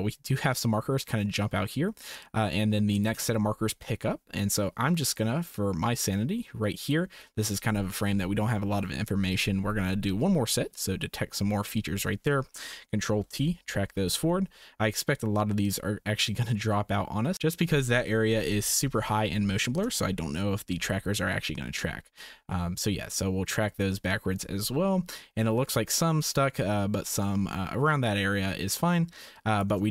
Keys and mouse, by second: 4.4-6.9 drag, 10.7-11.9 drag, 13.0 ctrl+t, 15.6-17.8 drag, 18.6 Right, 20.6 ctrl+shift+t, 27.1-29.6 drag.